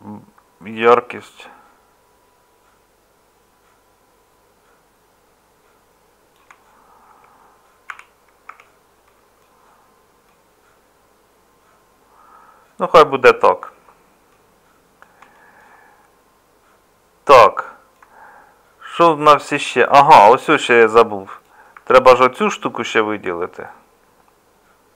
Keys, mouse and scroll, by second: 7.1 Tab, 7.9 a, 8.5 Tab, 18.5-19.9 middle drag, 19.9 Tab, 22.9-24.9 middle drag.